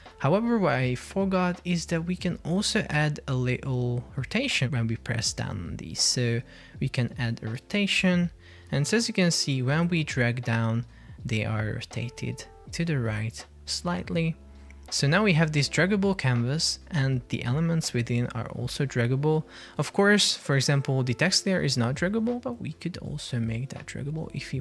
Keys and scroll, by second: 8.1 super+p, 22.4 Escape.